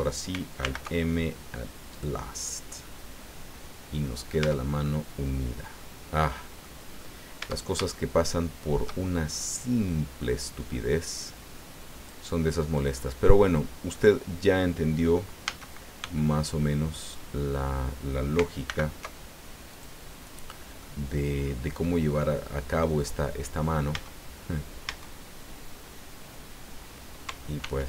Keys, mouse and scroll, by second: 0.6 alt+m, 1.9 click, 2.8-3.1 scroll down 2, 3.2-4.4 middle drag, 4.4 Tab, 4.8-6.0 drag, 6.1 click, 6.9-7.3 scroll up 1, 7.4 Tab, 7.9-9.0 shift+middle drag, 9.3-10.3 shift+middle drag, 11.9 click, 12.9-14.1 middle drag, 15.4 a, 16.0 b, 16.5 click, 18.6 alt+m, 19.7 click, 20.8-22.1 drag, 22.4 scroll up 2, 23.0 scroll down 2, 23.9 Tab, 24.8 Tab, 27.6 ctrl+r.